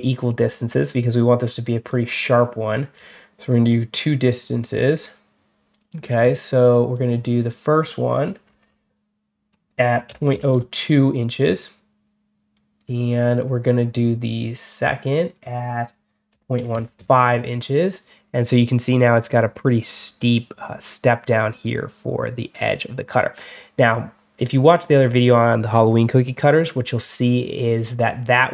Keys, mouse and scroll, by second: 1.7 click, 2.8 click, 5.6 click, 6.1 click, 8.3 middle click, 14.7 click.